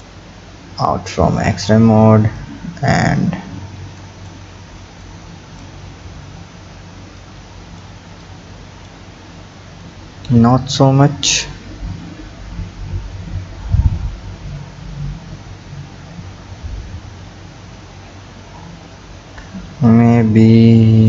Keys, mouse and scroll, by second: 0.4-0.8 scroll down 4, 1.4 click, 2.4-5.1 drag, 5.9 scroll up 3, 7.2-8.3 drag, 9.8-14.1 drag.